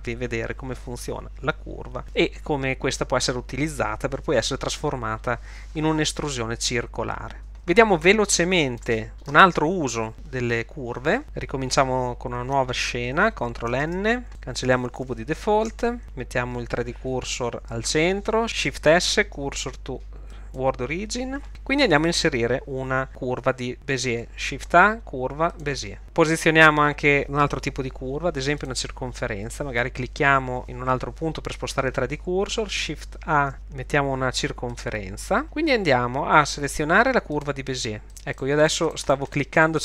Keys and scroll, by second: 13.9 ctrl+n, 15.7 x, 18.9 shift+s, 24.1 shift+a, 33.5 shift+a.